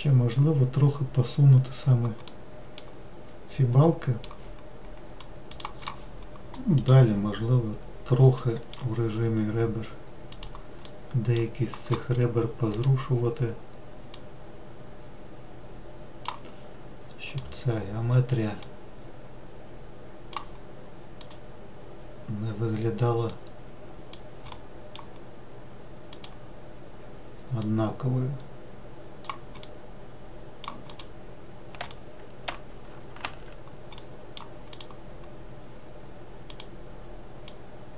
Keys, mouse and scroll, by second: 6.4 middle click, 7.0-8.0 scroll up 2, 8.0-10.1 middle drag, 10.1 click, 10.7-12.6 middle drag, 12.6-14.3 drag, 17.2 click, 18.4 click, 21.0 click, 23.1 click, 24.4-25.9 middle drag, 25.9 click, 27.5 click, 29.5-30.7 middle drag, 30.7 click, 31.8-33.1 middle drag, 33.1 ctrl+z, 33.8-34.5 middle drag, 34.5 click, 36.3 click, 37.3 click.